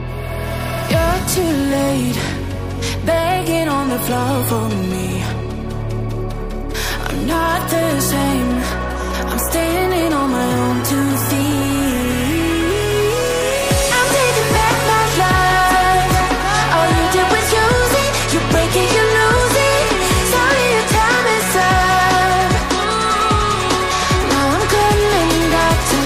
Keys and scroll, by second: 18.6 ctrl+d, 18.8 ctrl+j.